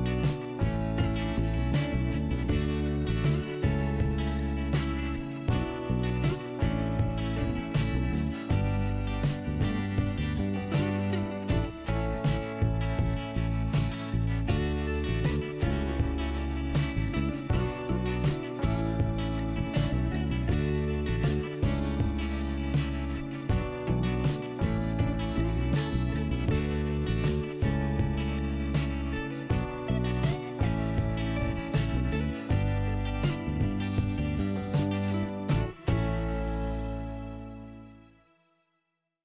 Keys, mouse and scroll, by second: 0.1 scroll down 1, 0.9 click, 2.1 click, 3.6 click, 4.8 click, 6.4 click, 7.3 click, 8.6 click, 9.7 click, 14.2 click, 15.1 click, 16.8 click, 17.8 click, 19.2 click, 20.3 click, 23.1-23.8 scroll up 1, 23.8 click, 26.5 click, 26.6 click, 27.5 click, 28.1 click, 29.1 click, 30.7-31.4 scroll down 1, 31.7 click, 32.8 click, 33.4 click, 35.5-36.0 scroll down 2, 37.3 scroll up 1.